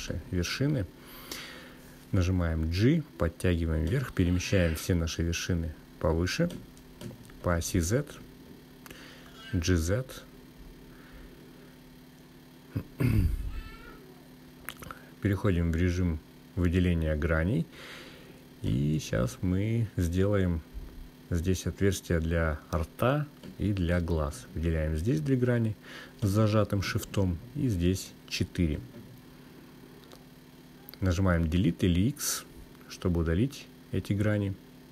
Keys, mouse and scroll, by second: 0.4-1.7 drag, 3.8 g, 4.5 Up, 4.8 Up, 5.3 Up, 5.4 Up, 5.6 Up, 6.3 Up, 8.8 Up, 9.8 Return, 13.6 click, 15.6-16.3 scroll up 1, 16.3-16.9 scroll up 2, 16.9 click, 21.2 click, 22.9 click, 27.7 shift+click, 29.0 shift+click, 29.6 shift+click, 30.3 shift+click, 31.0 shift+click, 33.0 Delete.